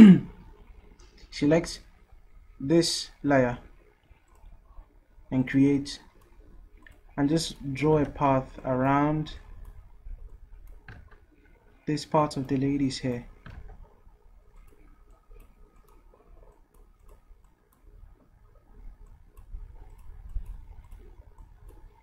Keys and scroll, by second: 8.1 ctrl+z, 11.0 ctrl+z, 11.6 ctrl+z.